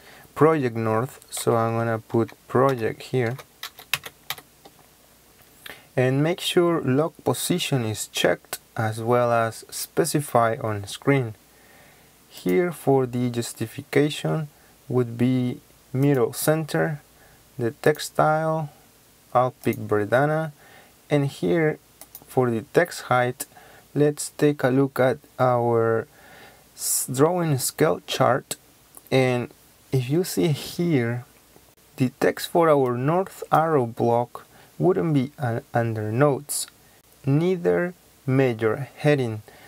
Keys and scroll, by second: 1.4-4.3 typing.